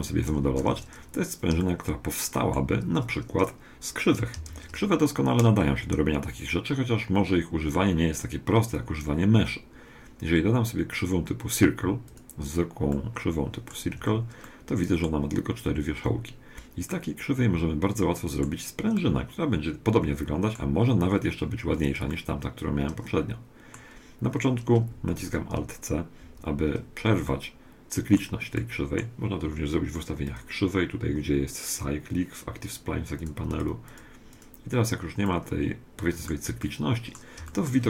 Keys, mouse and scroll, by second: 0.3 2, 0.6 3, 1.6-3.6 middle drag, 4.5 shift+a, 12.9-16.4 middle drag, 13.9 Tab, 16.9-18.6 middle drag, 18.9-20.7 middle drag, 21.4-22.1 scroll up 1, 22.1-23.9 middle drag, 26.3 alt+c, 27.3-30.5 middle drag, 30.3-32.0 drag, 33.2-36.1 drag, 35.3-37.8 middle drag.